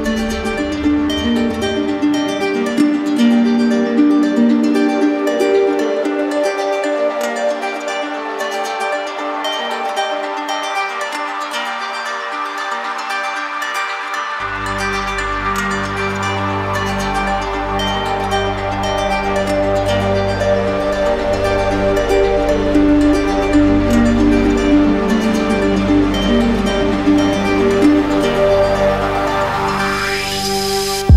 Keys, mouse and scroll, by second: 3.1 ctrl+z, 4.3 right click, 5.1 right click, 9.1 click, 9.9 click, 11.0 click, 12.0 click, 14.0 click, 15.3 click, 15.6 ctrl+d, 17.7 right click, 18.0 shift+right click, 19.5 ctrl+click, 20.7 q, 22.2-23.9 ctrl+drag, 24.6-25.7 right drag, 25.8-28.3 right drag, 28.3 ctrl+click, 29.7 right click.